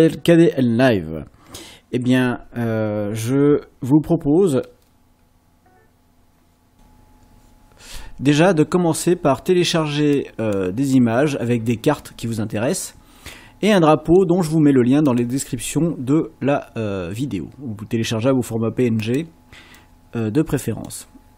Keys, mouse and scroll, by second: 9.7-11.1 drag, 13.8 click, 19.8-21.0 drag.